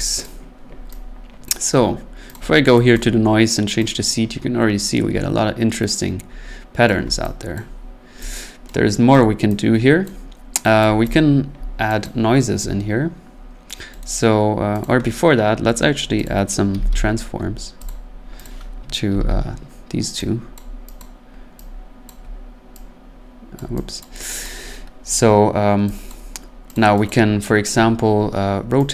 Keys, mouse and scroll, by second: 0.2 click, 1.4 click, 2.3 click, 2.9 click, 6.8 click, 7.5 click, 8.3 click, 9.1 right click, 10.0 click, 10.8 click, 11.1 click, 12.0 click, 14.0 right click, 14.8 click, 15.7 right click, 16.2 click, 16.7 typing, 17.9 click, 18.4 click, 19.1 ctrl+c, 19.3 ctrl+v, 20.5 click, 21.0 click, 22.1 click, 23.6 click, 24.0 click, 24.4 click, 25.2 scroll, 25.9 scroll, 26.1 click, 26.7 click, 27.0 click.